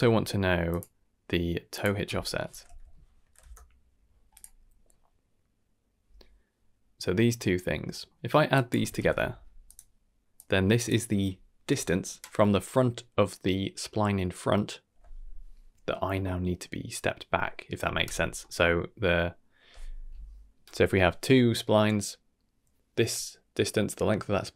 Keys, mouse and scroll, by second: 1.7-3.4 drag, 4.3 click, 7.3 middle click, 7.6 scroll up 2, 7.9 middle click, 8.5-9.7 drag, 8.9 d, 10.3-10.8 drag, 18.2 scroll down 1, 18.4 middle click.